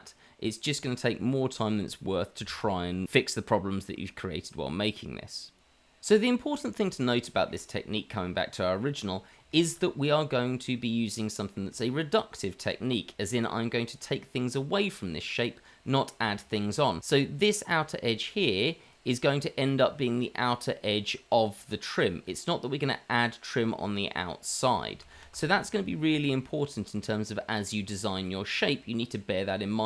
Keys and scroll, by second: 1.5 h, 2.0 q, 2.3 q, 3.0 Tab, 3.3 Tab, 3.6 Tab, 4.5 Tab, 5.1 Tab, 25.5 ctrl+z, 28.1 ctrl+z.